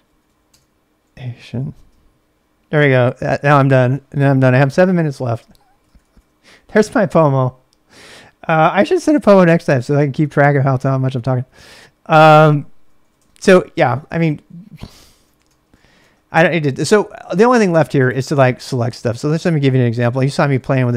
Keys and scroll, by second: 0.0-2.0 typing, 5.5-6.5 typing, 11.9-20.9 typing, 15.9 Return.